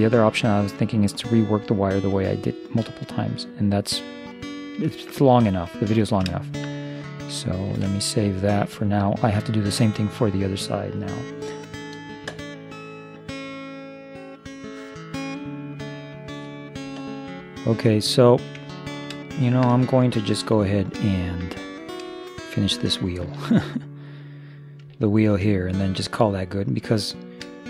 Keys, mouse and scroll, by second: 5.0-6.5 middle drag, 7.7 ctrl+s, 18.7-27.6 middle drag, 24.1-25.6 right drag.